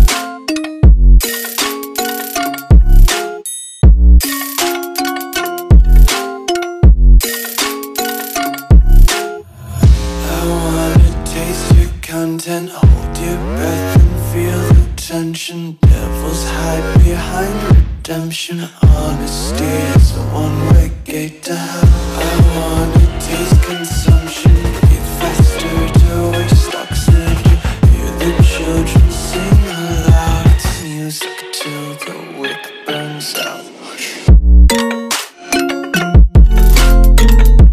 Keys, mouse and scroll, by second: 3.6 click, 11.8 click, 14.4 Delete, 15.5 click, 20.1 ctrl+s, 28.6 click, 35.2 click, 37.4 Delete.